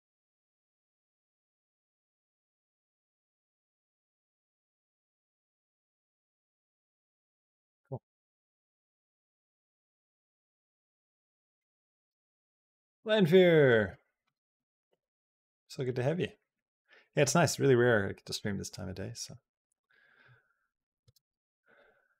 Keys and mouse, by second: 0.2 space, 1.0 click, 1.1 space, 8.6 space, 8.8 middle click, 9.5 middle click, 11.4 click, 11.9 space, 14.1 space, 20.8 space.